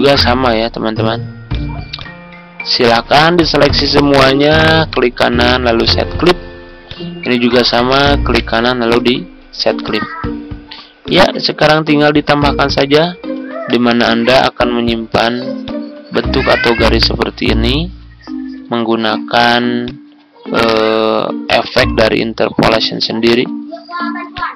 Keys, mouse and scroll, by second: 4.8 right click, 5.7-7.9 drag, 8.3 right click, 9.8-13.3 drag, 14.9 ctrl+click, 15.6 click, 16.3 ctrl+scroll down 1, 17.0 click, 18.9 ctrl+click, 19.8 click, 20.7 ctrl+z, 21.4-23.4 drag, 23.6-24.3 ctrl+scroll down 1, 24.3 click.